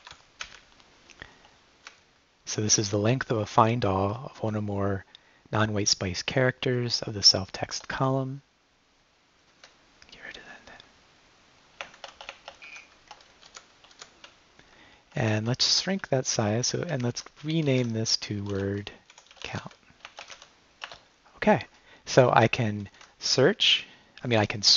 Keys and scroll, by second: 0.0 =, 0.4 Up, 1.9 Up, 7.7 Return, 9.6 Right, 10.4 =, 11.8 BackSpace, 12.6 Escape, 13.5 -, 14.2 Left, 15.2 Right, 15.5 shift+-, 16.0 Left, 16.9 Right, 17.7-20.8 typing, 20.9 Return, 22.7 Left, 22.9 Right, 23.3 [.